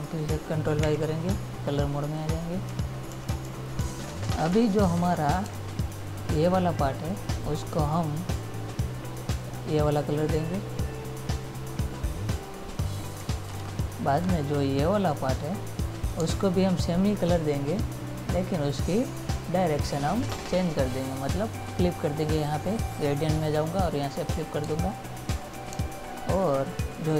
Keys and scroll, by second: 1.1 ctrl+y, 3.3 ctrl+-, 5.7 space, 16.4 space, 24.9 space.